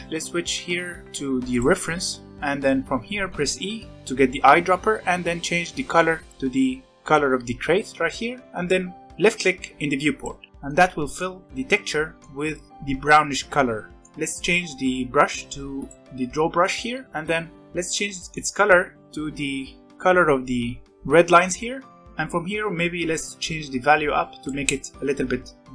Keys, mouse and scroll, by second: 2.1 scroll down 3, 2.3-2.7 scroll up 1, 3.9 e, 10.1 click, 10.7-15.7 middle drag, 15.7 click, 17.0-17.6 scroll up 4, 17.6-18.6 middle drag, 18.6 e, 20.9 middle click, 21.7 scroll down 1, 22.0 click.